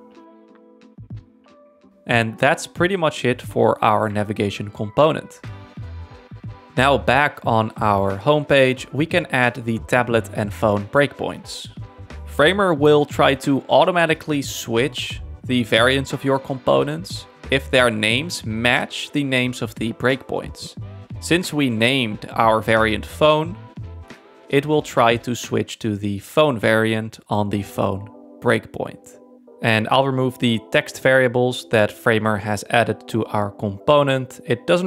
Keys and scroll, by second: 0.2 super+1, 18.4 space.